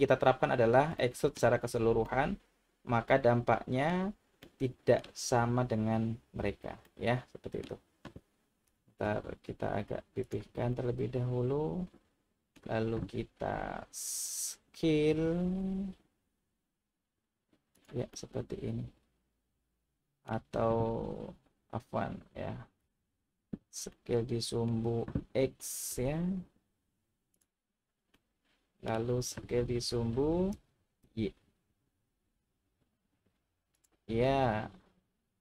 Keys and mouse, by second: 1.1 shift+middle drag, 2.0-3.9 middle drag, 4.4 middle click, 6.8 middle click, 8.7 g, 9.0 z, 10.2 click, 10.7-12.6 middle drag, 15.1 s, 17.7 click, 18.2-20.2 middle drag, 22.8 ctrl+z, 24.0 middle click, 25.6 s, 25.9 x, 27.3 click, 28.2-28.9 middle drag, 30.5 s, 31.0 y, 33.7 click, 34.2-35.4 middle drag.